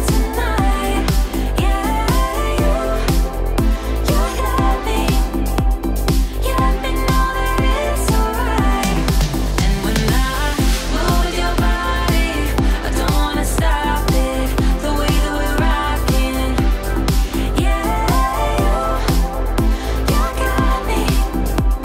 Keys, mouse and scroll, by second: 11.4 ctrl+d, 12.5 Return, 13.0 Right, 13.3 shift+Left, 13.8 1, 14.0 Return, 15.1 click, 18.0-19.3 alt+drag, 20.0-21.0 alt+drag.